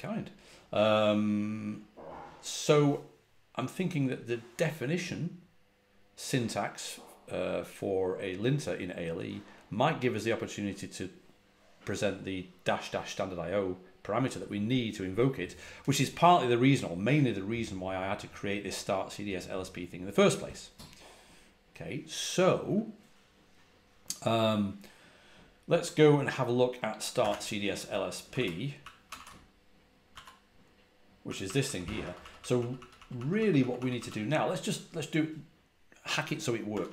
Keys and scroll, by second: 26.8-32.4 typing, 36.6-36.9 typing.